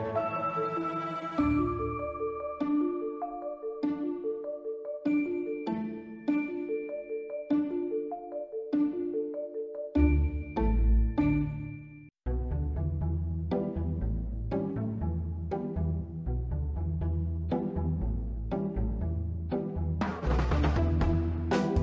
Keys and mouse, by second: 0.1 click, 0.6-1.5 drag, 2.0-2.6 drag, 3.4 click, 4.4-5.0 middle drag, 5.2 ctrl+middle drag, 5.9 Tab, 6.2 1, 6.4 click, 6.6 b, 7.7 middle click, 8.6-10.0 drag, 10.5 b, 12.0 s, 12.5 y, 13.5 click, 14.4 b, 15.3 b, 16.5 s, 17.1 y, 19.2 b, 20.4 click, 21.7 Tab.